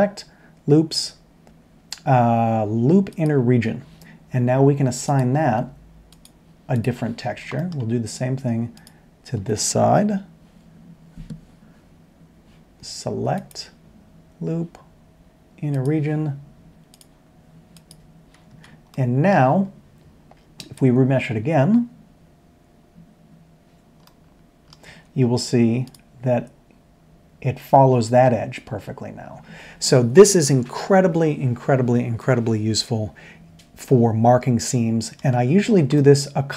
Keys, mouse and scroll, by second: 7.5 middle click, 8.7 alt+click, 16.9 click, 17.8 click, 18.5 Tab, 24.8 Tab, 32.2 middle click, 35.9-36.5 middle drag.